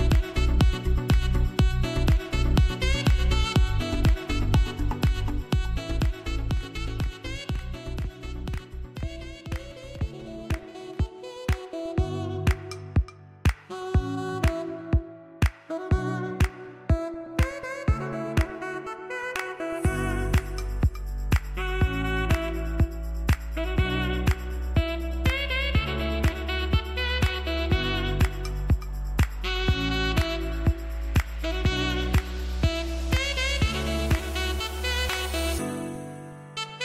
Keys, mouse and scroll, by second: 15.0-15.4 scroll up 1, 15.4 click, 15.9-16.3 scroll down 1, 16.3-18.9 drag, 18.9-19.5 typing, 19.7-28.3 drag, 33.3-33.7 scroll down 1, 33.7-35.1 drag, 35.1-35.5 scroll down 1, 35.5 click, 36.4-36.7 scroll up 1, 36.7 click.